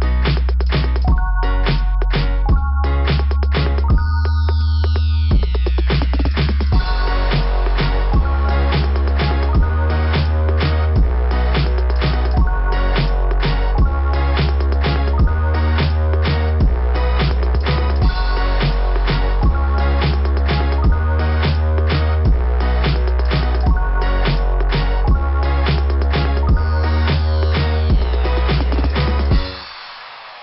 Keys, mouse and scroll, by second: 2.4 typing, 3.5 typing, 6.0 scroll down 2, 7.5-7.9 scroll down 3, 12.6 scroll up 2, 12.6 typing, 13.9 click, 15.9 click, 17.2 click, 18.5 click, 18.7 click, 19.9 click, 20.3 scroll up 2, 20.6 scroll down 2, 20.9 scroll up 2, 21.0 scroll down 2, 21.2 scroll up 1, 22.6 scroll down 1, 24.6 click, 24.7 click, 26.8 click, 26.9 click, 28.3 click, 30.3 click.